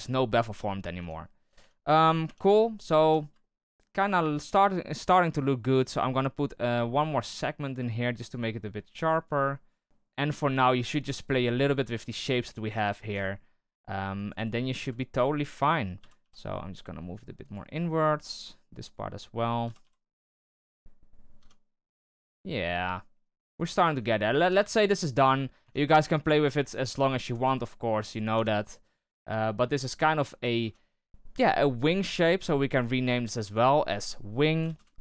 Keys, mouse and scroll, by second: 0.9 Tab, 1.4 Tab, 1.5 Tab, 1.8 middle click, 2.2 Tab, 2.5 middle click, 2.8 scroll up 1, 3.0 Tab, 3.4-6.7 shift+middle drag, 7.3-9.5 drag, 9.5 middle click, 9.8 z, 10.3 z, 11.1 right click, 11.7 alt+right click, 12.3 right click, 12.7 c, 15.1 shift+right click, 16.0 g, 18.1 right click, 18.8 ctrl+right click, 19.6 g, 20.5 z, 21.4 Tab, 22.0 Tab, 23.5 right click, 24.1 scroll down 4, 24.3 Tab, 25.4 scroll up 1, 25.6 Tab, 26.0 right click, 27.0 shift+right click, 27.4 g, 28.3 Tab, 28.8 scroll down 3, 29.0-29.8 middle drag, 29.8 Tab, 30.5 Tab, 32.5-33.3 scroll down 2, 33.3 click, 33.4-35.0 drag.